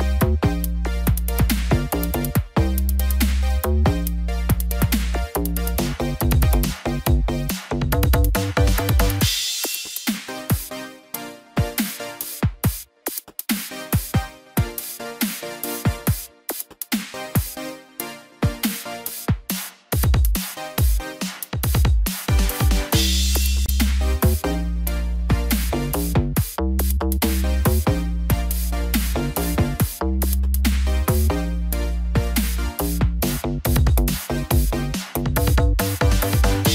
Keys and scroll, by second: 6.4 ctrl+t, 13.1 ctrl+j, 13.9 ctrl+t, 27.9 ctrl+d.